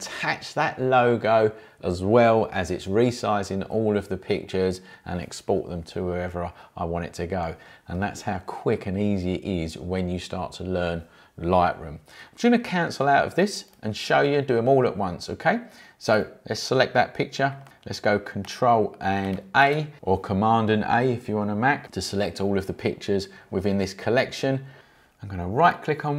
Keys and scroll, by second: 19.3 ctrl+a.